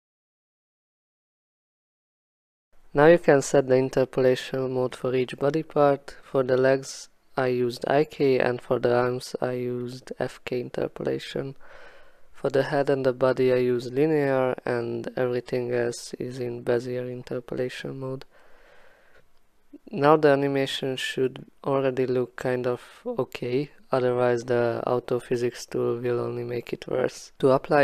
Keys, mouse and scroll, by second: 0.4 click, 2.7 click, 3.6 click, 4.4 click, 7.7 click, 10.2 click, 11.0 click, 12.5 click, 13.9 click, 16.4 click, 17.4 alt+middle click, 17.6 click, 19.5 click, 20.3 click, 21.5 click, 22.4 click, 22.7 x, 24.7 x, 26.3 click, 27.0 click.